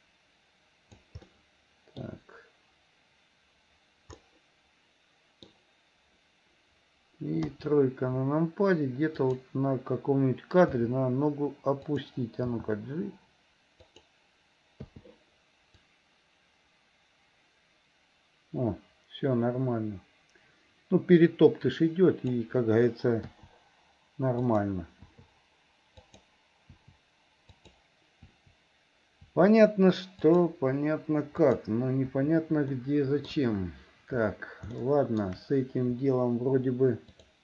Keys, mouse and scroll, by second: 1.2 middle click, 4.2-5.5 middle drag, 7.4 KP_3, 9.3 click, 10.8 r, 12.4 g, 15.0 i, 15.9-22.5 drag, 17.7 typing, 23.4 i, 24.5 click, 25.1 i, 26.1 click, 26.9 i, 27.7 click, 28.2 i, 29.4 i, 30.3 click, 31.5 click, 32.2 i, 32.7 middle click, 33.3 KP_1, 34.8 shift+middle click, 37.2 click.